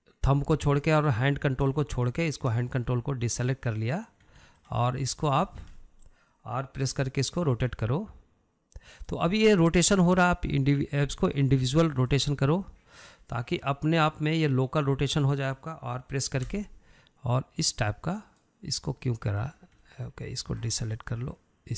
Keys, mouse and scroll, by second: 2.3 ctrl+click, 3.5 shift+click, 4.1 scroll down 3, 4.3-5.8 middle drag, 5.8 scroll up 2, 6.0-6.8 shift+middle drag, 6.8 scroll down 2, 7.0-8.5 shift+middle drag, 8.5 r, 11.8-14.8 drag, 15.2-18.0 middle drag, 18.0 r, 20.3-21.7 middle drag.